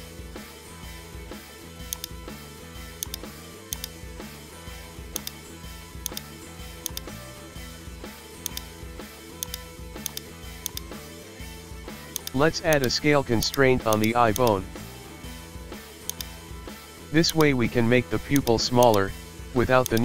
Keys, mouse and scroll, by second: 0.4-1.4 scroll down 1, 1.9 click, 3.0 shift+click, 3.7 shift+click, 4.5 shift+middle click, 4.8-5.2 scroll up 1, 5.2 right click, 6.1 click, 6.9-8.5 drag, 9.4 click, 10.6-12.3 drag, 12.7-15.0 drag, 15.0 scroll down 1, 16.1-17.6 drag, 18.4 click, 19.9-20.0 drag.